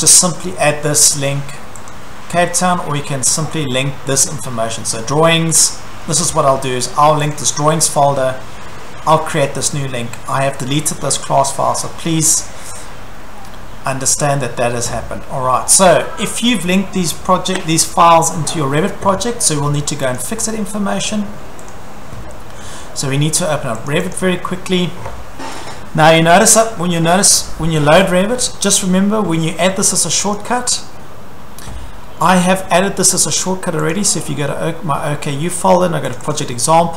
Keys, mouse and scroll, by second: 1.9 click, 5.0 click, 7.3 click, 20.2 click, 21.7 click, 23.9 click, 24.2 click, 30.3 click, 33.9 click, 36.1 click, 36.3 click.